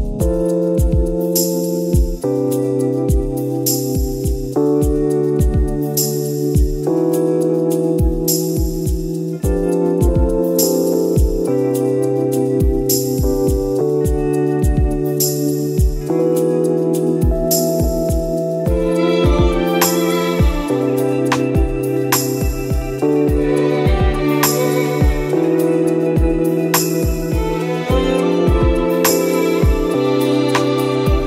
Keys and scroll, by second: 0.5 space, 1.6 space, 2.1 ctrl+-, 2.4 space, 2.5 ctrl++, 2.6 space, 7.2 ctrl++, 8.0 ctrl+z, 11.3 ctrl+z, 15.6 ctrl+-, 19.8 space, 21.4 ctrl+z, 23.4 space, 24.4 space, 27.7 space, 28.9 space.